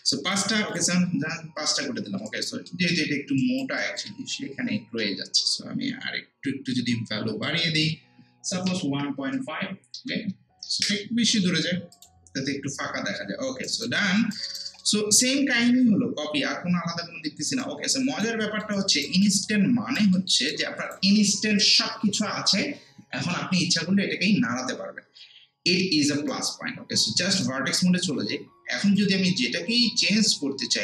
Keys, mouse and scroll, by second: 0.7 click, 1.4 scroll down 1, 2.1 scroll up 1, 2.3 alt+right click, 2.7 alt+middle click, 3.4 alt+right click, 3.8 alt+middle click, 4.6 ctrl+z, 8.7 1, 9.7-10.5 typing, 10.8 Return, 11.9 click, 12.9 scroll down 1, 13.4 scroll up 1, 13.7 alt+right click, 14.0 middle click, 14.3 alt+right click, 14.8 middle click, 17.6-20.2 alt+right drag, 18.4 middle click, 20.2 alt+middle click, 20.5-25.7 alt+right drag, 26.3-29.0 right drag, 29.0-30.8 drag.